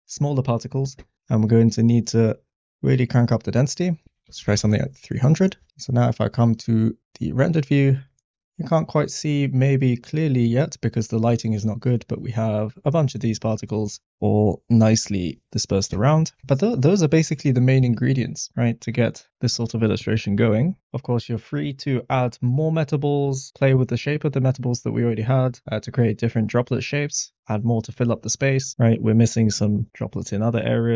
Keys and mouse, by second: 1.2 middle click, 2.5 click, 3.0-4.8 drag, 4.3 0, 7.4 click, 8.3 click, 13.6 click, 18.2 click, 20.2 g, 20.3 z.